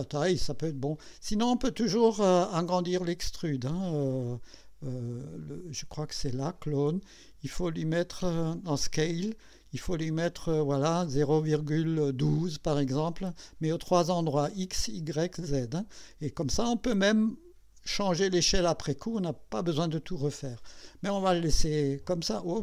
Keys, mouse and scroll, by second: 2.8 click, 5.4 click, 6.4 click, 8.6 click, 9.1 scroll down 1.